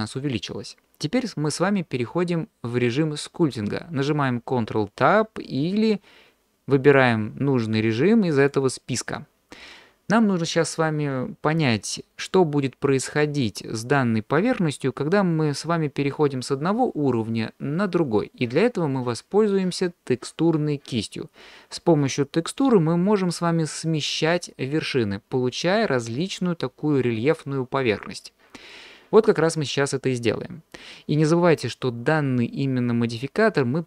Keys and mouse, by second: 7.0-8.6 drag.